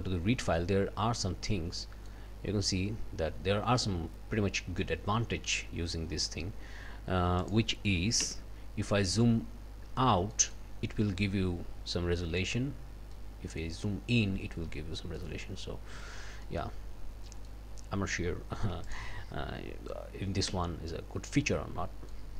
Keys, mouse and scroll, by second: 0.6-1.5 scroll up 4, 1.8 click, 3.8-4.4 scroll down 4, 4.6 click, 5.5 click, 6.4 scroll up 2, 7.4 click, 8.2 d, 8.9-9.5 scroll down 1, 9.9 scroll down 1, 10.3 middle click, 11.7-12.0 scroll up 1, 13.1 middle click, 13.9-14.4 scroll up 2, 14.4-15.1 scroll down 2, 15.2 middle click, 15.7-16.4 scroll down 2, 16.4 middle click, 16.7-17.2 scroll up 2, 17.3 middle click, 17.3-17.7 scroll up 2, 18.9 click, 20.5 d, 21.3-22.3 drag.